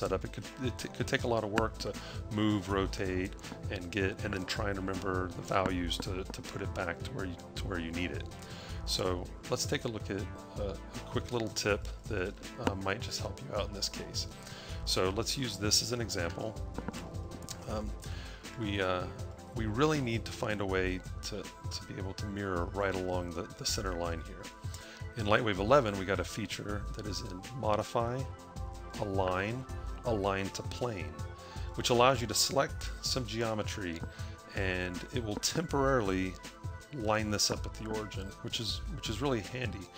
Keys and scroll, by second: 11.1 a, 11.8 a, 16.4 a.